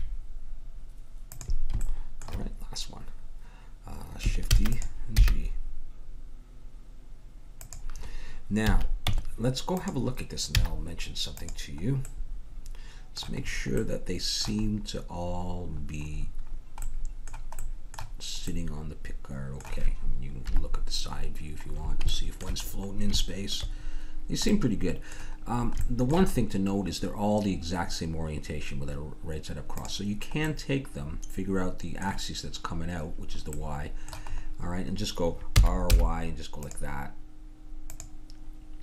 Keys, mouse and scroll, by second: 2.2-3.7 drag, 4.5 shift+d, 5.2 g, 8.7 a, 9.1 Tab, 10.5 z, 20.5 KP_3, 26.0-28.4 middle drag, 29.7-31.7 drag, 31.7-33.3 middle drag, 33.7 middle click, 35.6 r, 37.9-38.8 drag.